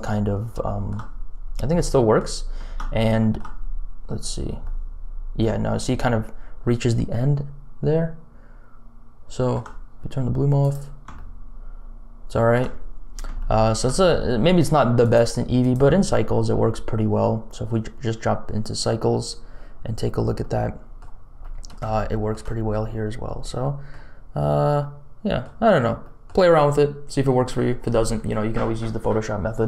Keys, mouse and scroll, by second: 0.3 scroll up 2, 0.6 shift+middle click, 1.1-1.7 scroll up 3, 1.7 middle click, 2.3-3.0 scroll down 3, 3.1 shift+middle click, 3.4 scroll down 1, 3.6-4.1 scroll up 1, 4.1 scroll up 1, 4.6-9.5 shift+middle drag, 10.6 click, 11.1-12.5 shift+middle drag, 12.7-13.2 scroll down 4, 13.3 shift+middle click, 14.9-16.0 drag, 19.8-20.3 scroll up 2, 20.3 middle click, 21.3 middle click, 21.9 shift+middle click, 22.7 scroll down 1, 23.2 scroll down 1, 23.5 middle click, 24.7 middle click, 26.0 middle click.